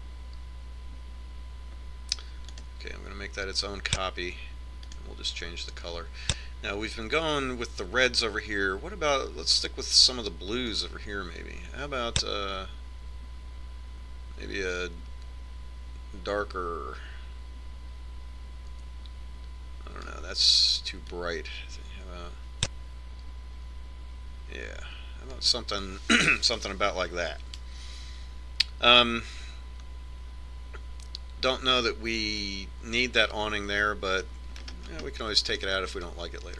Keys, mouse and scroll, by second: 3.9-10.4 drag, 28.1-30.0 middle drag, 30.6 middle click, 36.2-36.5 middle drag.